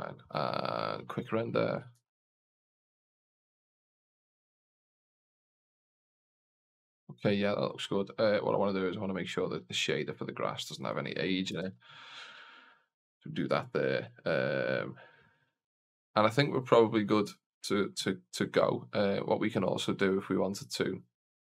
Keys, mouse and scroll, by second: 2.0 shift+z, 6.6 shift+z, 9.4 click, 10.6-12.1 drag, 20.6-21.4 scroll up 2.